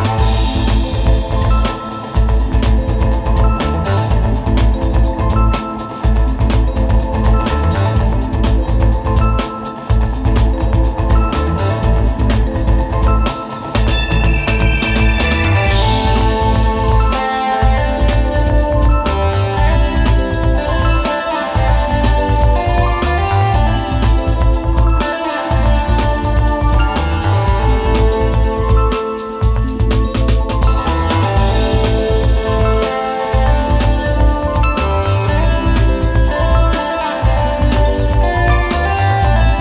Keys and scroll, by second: 0.0 super+z, 1.6 space, 2.2 super+space, 2.8 super+z, 3.7 space, 4.4 space, 4.7 space, 5.9 super+g, 7.5 space, 7.9 space, 8.2 space, 9.4 super+j, 10.3 space, 14.9 space, 15.6 super+space, 17.7-19.9 typing, 21.0 space, 21.9 super+z, 22.4 space, 22.6 space, 23.9 space, 24.7 space, 25.5 super+z, 30.1 space, 31.3 space, 31.8 space, 33.9 space, 34.5 super+space, 35.4 space, 35.9 space.